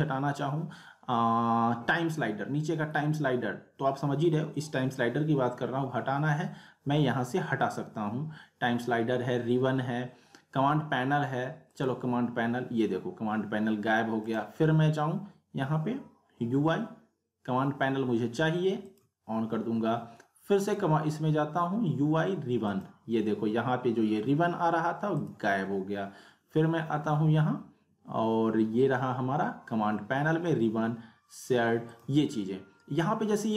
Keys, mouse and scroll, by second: 11.7 click, 11.7 click, 14.3 click, 18.9 click, 25.1 click, 31.9 click.